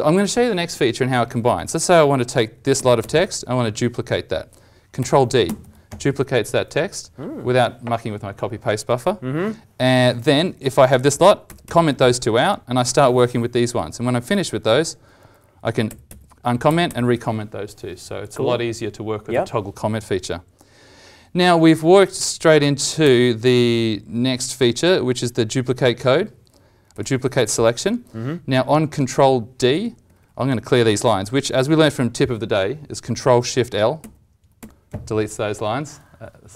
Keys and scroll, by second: 5.4 ctrl+d, 11.4 ctrl+/, 11.6 ctrl+/, 15.8 ctrl+/, 16.0 ctrl+/, 16.6 ctrl+/, 16.8 ctrl+/, 22.4 alt+Tab, 23.0 alt+Tab, 26.9 alt+Tab, 33.9 ctrl+shift+l, 34.5 ctrl+shift+l.